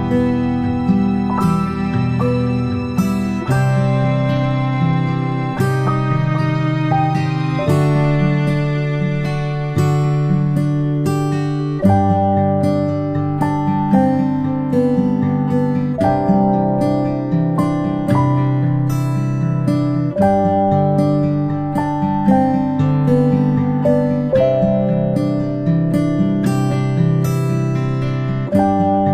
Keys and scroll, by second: 2.7-6.3 space, 12.2 ctrl+a, 16.0 space, 16.3 space, 20.1 space, 21.1 p.